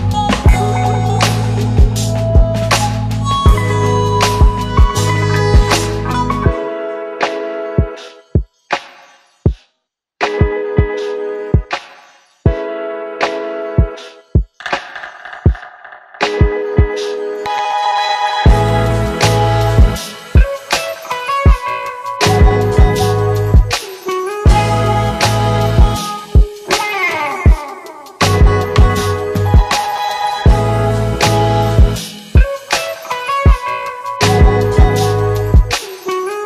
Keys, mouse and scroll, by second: 2.3 click, 6.6 click, 8.2 ctrl+d, 10.2-12.9 drag, 16.6 click, 21.3 click, 26.0 click, 29.0-29.6 click, 30.0-31.9 typing, 33.7-35.6 click.